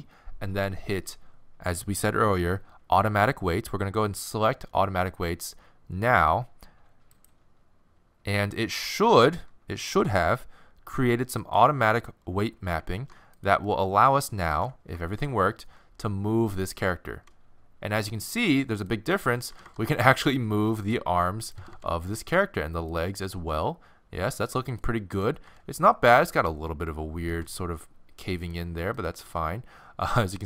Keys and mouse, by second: 11.4-15.0 right drag, 12.9 ctrl+Tab, 13.7-15.2 middle drag, 16.3 middle click, 17.2 r, 19.3-24.7 right drag, 19.5 r, 21.6 r, 23.3 r, 25.1-26.8 right drag, 25.5 r, 27.3 r, 29.0-30.4 right drag, 29.3 r.